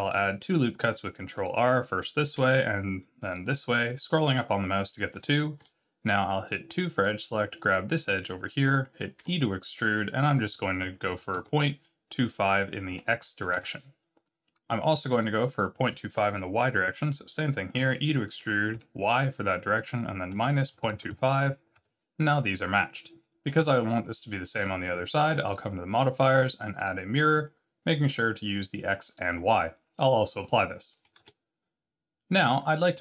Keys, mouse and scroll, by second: 0.1 ctrl+r, 2.5 ctrl+r, 5.6 2, 7.0 click, 9.2 e, 14.2 middle click, 15.1 click, 17.7 e, 23.5 Tab, 25.5 click, 26.0 click, 31.0 click, 31.2 ctrl+a, 32.5-32.9 scroll down 5.